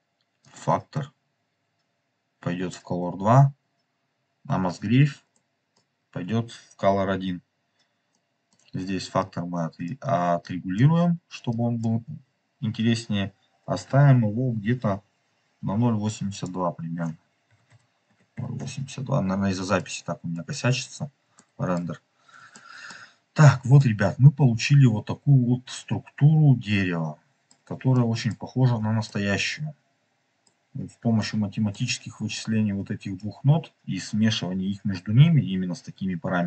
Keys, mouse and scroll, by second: 0.4-2.8 drag, 5.4-5.8 middle drag, 8.0 middle click, 9.1 click, 10.4 click, 11.4 click, 16.2 click, 18.7 click, 19.8-20.4 middle drag, 21.3-21.7 shift+middle drag, 21.9 scroll up 2, 22.4-22.8 shift+middle drag, 23.3 scroll down 2, 23.9-24.5 middle drag, 24.8-27.4 middle drag, 27.8 shift+middle click, 28.6 scroll down 1, 29.0-30.4 middle drag, 31.1 middle click, 32.3 click.